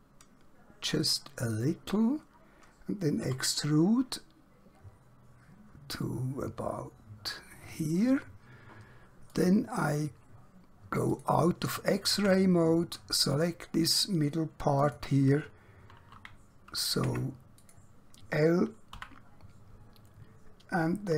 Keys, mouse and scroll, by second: 1.0 click, 3.2 e, 7.8 click, 12.3 Tab, 13.2 click, 17.2 Tab, 17.6 click, 18.9 l.